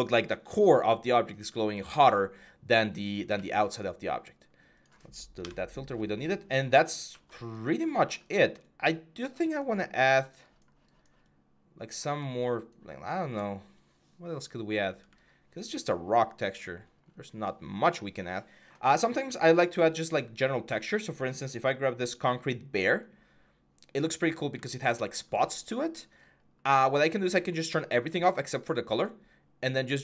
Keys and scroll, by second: 5.2 Delete.